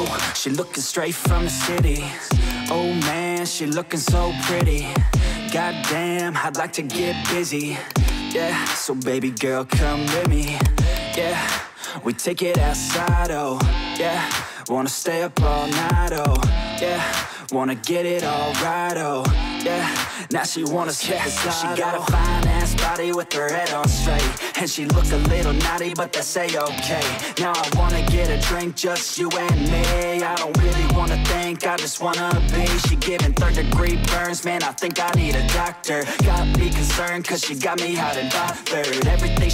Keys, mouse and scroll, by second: 0.0 click, 2.6 click, 3.7 8, 4.8 ., 5.9 9, 8.0-10.5 drag, 11.0 click, 12.0-13.2 typing, 16.3 click, 17.0-18.9 typing, 18.7-21.3 drag, 26.7 alt+click, 27.5-31.7 typing, 34.0 click, 35.0 click, 35.4 click.